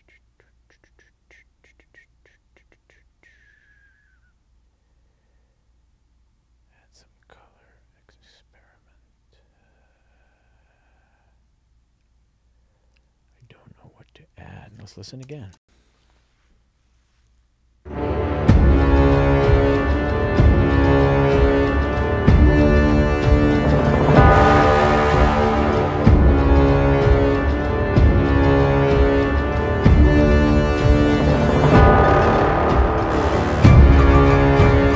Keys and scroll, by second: 15.6 space.